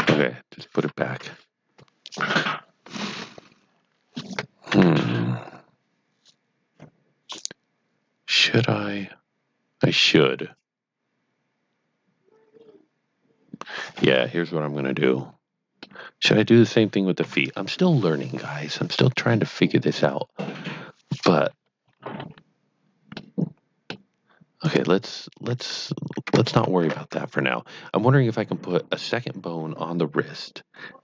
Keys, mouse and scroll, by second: 1.0 KP_1, 4.6 KP_7, 15.8 middle click, 17.2 KP_3, 23.1 KP_3, 23.2 middle click, 24.6 click, 28.4 middle click.